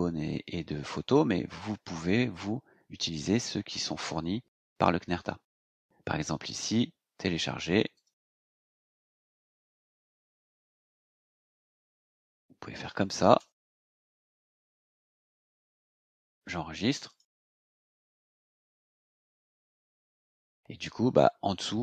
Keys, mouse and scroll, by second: 6.5 click, 7.9 click, 11.2 click, 12.8 BackSpace, 14.6 BackSpace, 15.9 scroll down 2, 17.0 click, 18.6-20.5 scroll down 10.